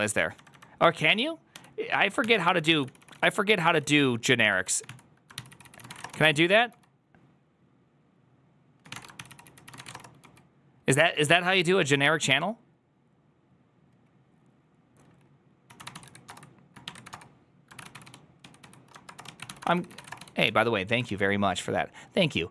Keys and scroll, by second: 0.2-7.1 typing, 8.6-11.1 typing, 17.5-20.6 typing, 20.9 alt+[.